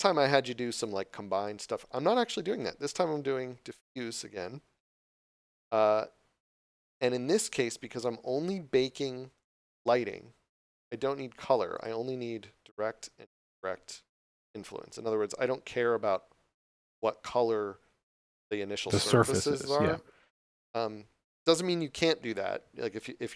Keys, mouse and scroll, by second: 1.4 click, 3.7 click, 11.7 click.